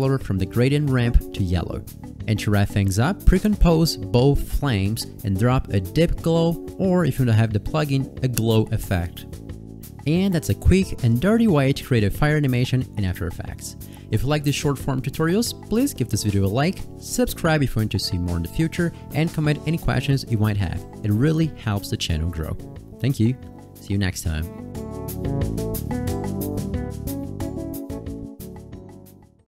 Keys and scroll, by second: 2.1 space, 17.9 space.